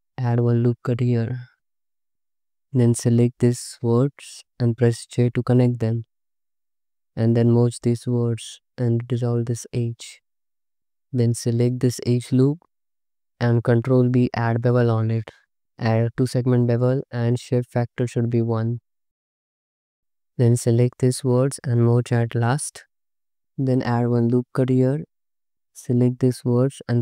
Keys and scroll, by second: 0.1 ctrl+r, 2.1 Escape, 2.4 c, 5.2 j, 7.6 m, 8.4 2, 9.3 ctrl+x, 10.8 2, 14.0 ctrl+b, 18.8 3, 19.7 1, 21.7 n, 22.4 m, 24.0 ctrl+r.